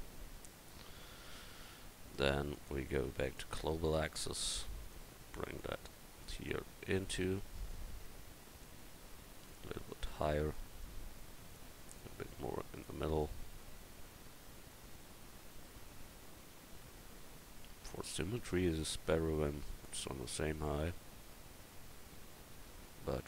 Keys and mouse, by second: 2.5-3.4 drag, 3.7-4.3 drag, 5.9 drag, 5.9-6.5 middle drag, 6.7-8.6 middle drag, 7.7-11.5 drag, 10.9-11.9 middle drag, 10.9 right click, 13.7-14.9 middle drag, 18.8-20.2 drag, 20.2-22.1 middle drag.